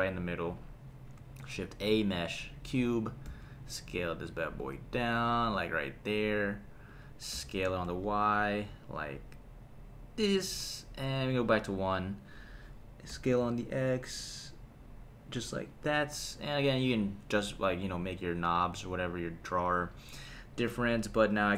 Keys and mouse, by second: 1.2 shift+a, 3.2 s, 6.9 click, 7.3 s, 7.9 y, 10.2 click, 11.3 KP_1, 13.1 s, 13.4 x, 15.7 click, 19.5 KP_3.